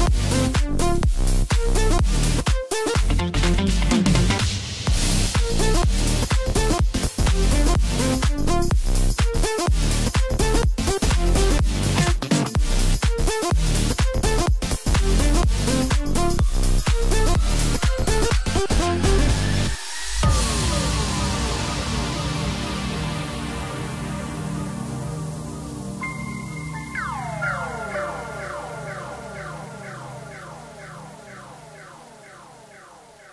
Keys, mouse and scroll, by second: 0.5 e, 2.9-3.4 scroll up 1, 3.4 scroll down 1, 3.6 middle click, 4.2-4.5 scroll up 1, 4.5 middle click, 5.4 scroll up 1, 6.4 ctrl+r, 10.3 click, 11.1 click, 11.9 shift+click, 12.5 shift+click, 13.3 shift+click, 13.9 shift+click, 14.6 shift+click, 15.2-16.0 scroll down 1, 16.0-17.6 middle drag, 19.7 click, 20.9-21.3 scroll up 2, 21.3-24.0 middle drag, 24.0 e, 26.7-27.7 scroll down 2, 27.7-30.6 middle drag, 30.6 g.